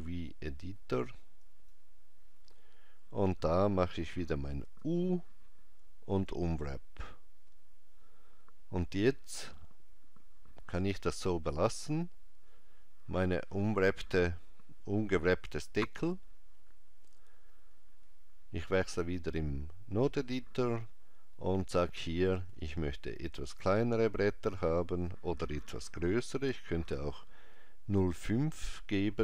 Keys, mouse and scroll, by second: 19.1 click, 22.5 click.